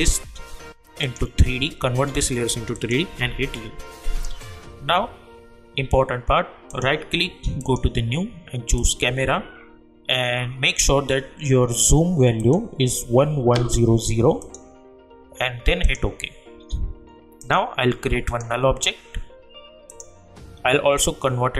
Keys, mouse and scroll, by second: 1.0 click, 3.2 u, 6.7 right click, 7.6 click, 12.4 click, 17.4 right click, 18.2-21.5 drag.